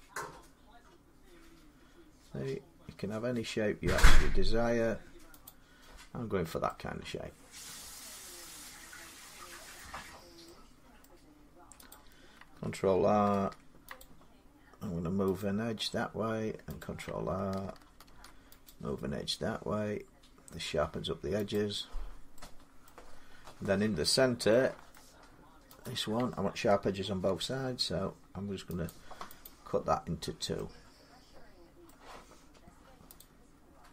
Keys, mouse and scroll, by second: 0.6-2.1 scroll up 6, 0.9 typing, 3.2 scroll down 3, 3.3 scroll up 1, 3.8 scroll down 2, 5.2 click, 6.1 scroll down 2, 7.1 middle click, 9.5 middle click, 9.5-10.2 scroll, 10.8 middle click, 11.7 click, 13.1 ctrl+r, 13.8 click, 15.2 click, 16.6 click, 17.8 ctrl+r, 18.4 click, 21.3 click, 22.6 middle click, 23.0-23.4 scroll down 3, 24.3 scroll up 3, 24.7 shift+middle click, 25.6 click, 27.0 ctrl+r, 27.7 scroll up 1, 28.5 shift+middle click, 28.6 click, 29.2 click, 31.1 scroll up 1, 31.6 middle click, 33.0 click.